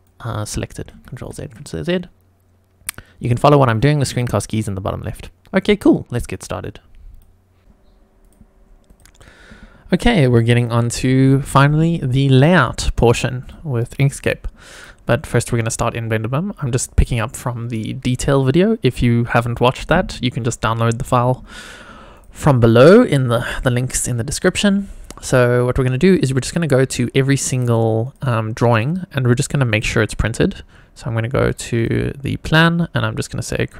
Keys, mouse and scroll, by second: 0.9 ctrl+z, 1.2 ctrl+z, 3.5 click, 14.7 click, 22.1 click, 28.0 click, 28.7 click, 29.7 click, 31.5 click, 33.5 click.